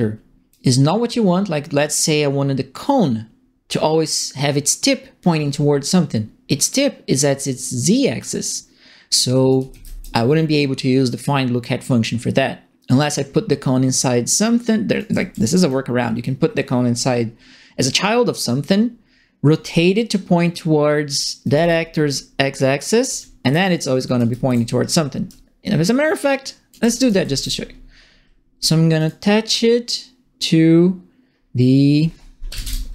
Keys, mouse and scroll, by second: 1.8 middle click, 9.3-10.2 typing, 9.4 right click, 14.9 right click, 15.1 w, 21.1-24.7 typing, 21.1 right click, 23.0 right click, 24.1 right click, 26.1 alt+click, 26.9-27.7 typing, 27.0 right click, 28.9 right click, 32.2-32.9 typing.